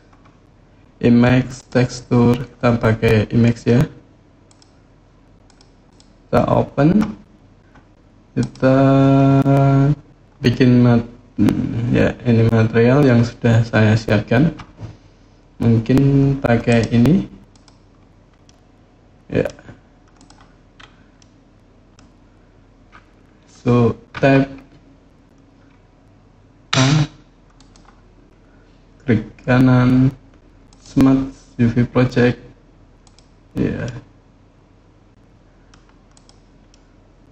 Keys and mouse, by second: 4.3-5.4 drag, 18.2-19.2 middle drag, 19.9 click, 20.9-21.7 middle drag, 23.9 Tab, 26.5 a, 29.6-33.0 drag, 33.6-35.5 middle drag, 35.9 click, 36.5-37.3 middle drag.